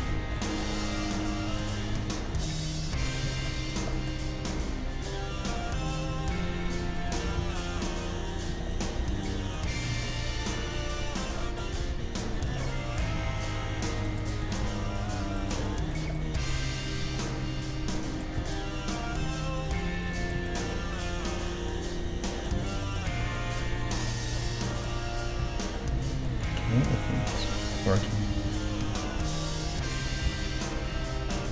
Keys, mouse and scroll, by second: 3.2-5.9 middle drag, 3.7-5.4 right drag, 4.5 g, 7.0-8.7 right drag, 7.2 g, 8.7-10.5 middle drag, 9.7-12.4 right drag, 11.4-12.4 middle drag, 11.7 g, 13.1-14.4 middle drag, 13.1 g, 16.6 g, 17.3-20.4 middle drag, 18.4 Tab, 20.5-22.5 middle drag, 22.6-24.3 middle drag, 23.2 Tab, 24.3 right click, 25.4 KP_3, 26.1 middle click, 28.2 g, 28.7 middle click, 28.7-31.5 right drag, 30.2 g.